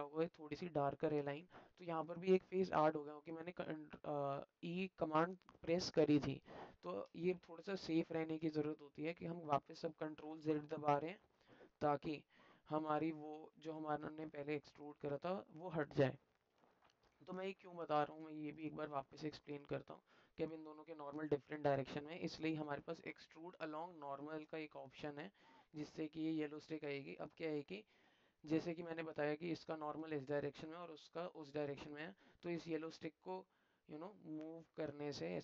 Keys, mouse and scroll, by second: 1.2 click, 1.7 middle click, 6.2 alt+middle click, 12.0-13.1 alt+middle drag, 14.2 alt+middle click, 16.5 middle click, 17.8 alt+shift+middle click, 18.8 alt+shift+middle click, 19.7 alt+middle click, 20.6 alt+middle click, 21.6 middle click, 22.9-24.6 drag, 28.3 middle click, 30.2 middle click, 31.1 alt+middle click, 31.4 alt+middle click, 31.9 middle click, 33.0-35.4 drag.